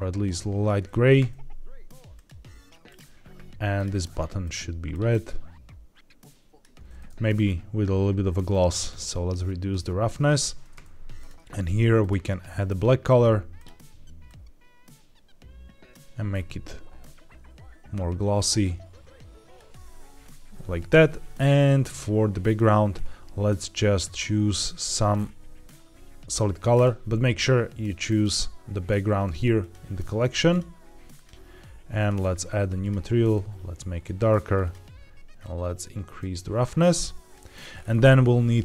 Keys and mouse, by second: 2.0 click, 2.8 click, 3.7 click, 4.3 click, 8.4-10.2 drag, 11.1 click, 11.9 click, 17.0-19.4 drag, 22.3 click, 29.5 click, 30.4 drag, 31.1 click, 31.9 click, 32.7 click, 36.1-37.3 drag.